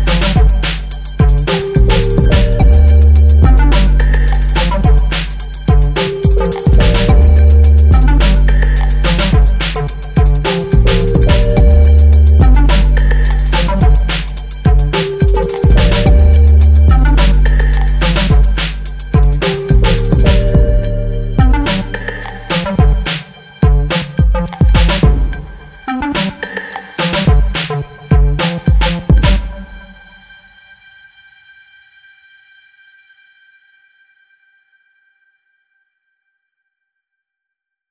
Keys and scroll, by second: 8.0 ctrl+j, 12.7 ctrl+j, 19.7 Up, 21.9 ctrl+t, 37.6 ctrl+j.